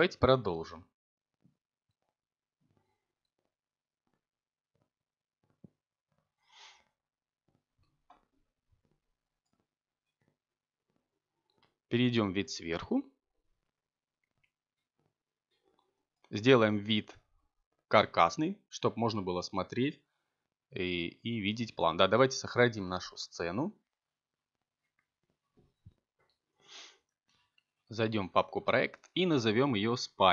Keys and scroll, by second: 8.7 7, 10.8 z, 16.2 Tab, 26.6 c, 28.4-29.9 typing.